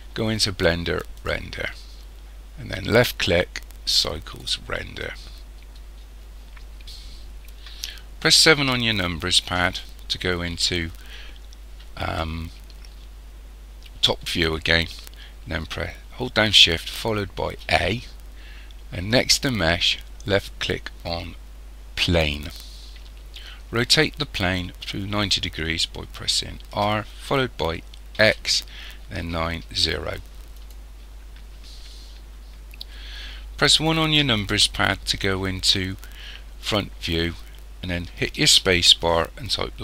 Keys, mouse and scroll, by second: 1.2 click, 8.5 KP_7, 9.5-10.2 scroll down 2, 10.2-10.7 scroll down 1, 10.7-11.3 scroll down 1, 11.3-11.8 scroll down 1, 17.5 shift+a, 26.7 r, 34.0 KP_1, 38.4 space.